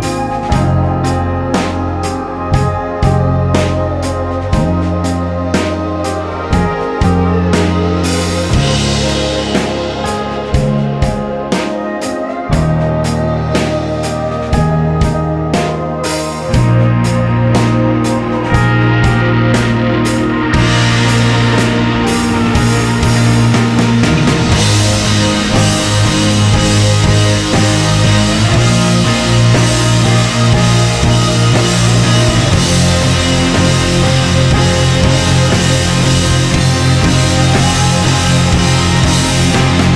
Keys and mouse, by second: 8.0 click, 8.7-9.7 middle drag, 9.7 click, 10.4-12.4 drag, 16.6 s, 21.8-25.7 drag, 26.0-28.8 drag, 37.3-39.8 drag, 37.4 f, 39.8 ctrl+z.